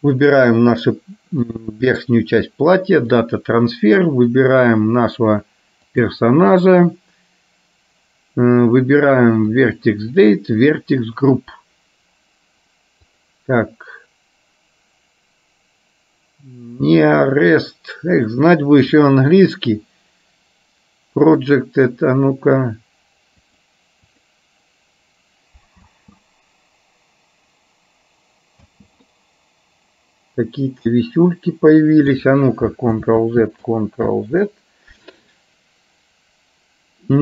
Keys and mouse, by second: 0.1 click, 1.7-3.5 drag, 4.4 click, 10.2 click, 11.2 click, 13.4-21.9 drag, 23.5-24.5 drag, 26.0 space, 28.7 space, 29.2-32.2 middle drag, 33.1 ctrl+z, 33.9 ctrl+z.